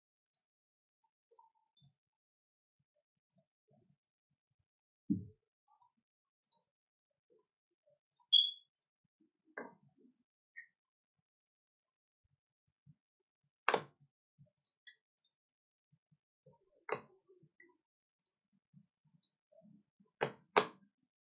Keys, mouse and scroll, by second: 1.7 alt+click, 3.3 alt+click, 5.7 alt+click, 6.4 alt+click, 7.2 alt+click, 8.1 alt+click, 8.7 alt+click, 14.5 alt+click, 15.2 alt+click, 16.4 alt+click, 18.2 alt+click, 19.1 alt+click.